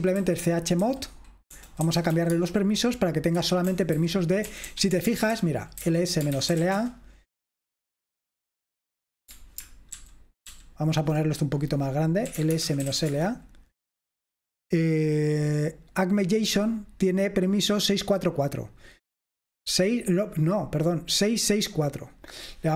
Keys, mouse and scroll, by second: 0.0-7.2 typing, 10.1 ctrl+alt++, 10.3 typing, 10.6 ctrl+alt++, 12.1-13.5 typing, 17.5-18.8 drag, 22.4 click.